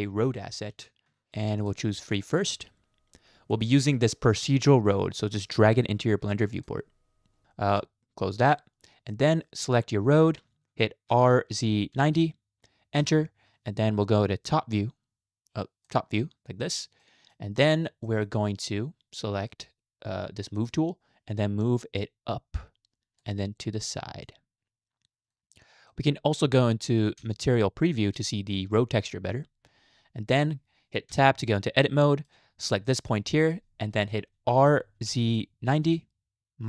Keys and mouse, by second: 1.6-2.6 drag, 7.5 shift+middle click, 9.1 middle click, 10.1 click, 11.1 r, 14.7 click, 15.9 click, 17.1 shift+middle click, 18.1 shift+middle click, 22.0 click, 22.2-23.2 drag, 24.3-25.3 drag, 25.9 shift+middle click, 27.2 z, 31.1 Tab, 32.1 shift+middle click, 32.8 click, 33.4 shift+middle click, 34.5 r.